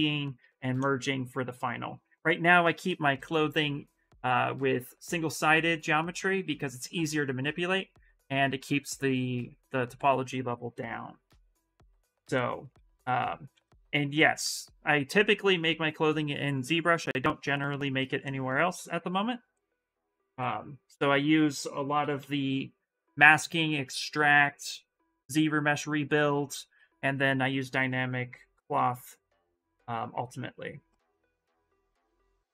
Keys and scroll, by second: 12.8 s, 19.8-22.4 typing.